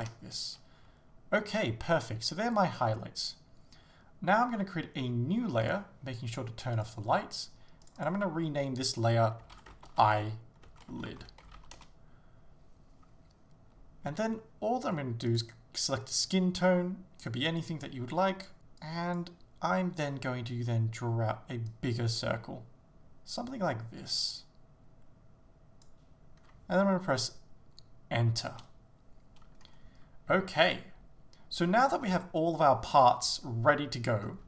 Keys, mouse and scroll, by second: 0.1 Return, 5.7-6.9 drag, 7.9-17.7 drag, 11.9 Return, 20.1-20.5 scroll down 1, 21.8 click, 28.6 Return, 29.6 scroll up 1, 30.6 shift+middle click, 32.1-34.1 scroll down 1, 34.1 scroll up 1.